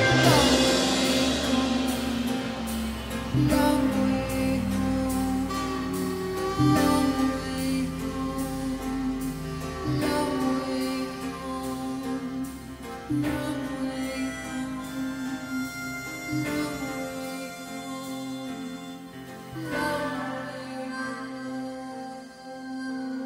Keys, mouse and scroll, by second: 1.6 Tab, 11.6 ctrl+j, 13.2 click, 14.0 click, 15.4 Delete, 16.8 Delete, 17.7 click, 18.3 Delete, 19.2 click, 20.2 click, 22.4 click.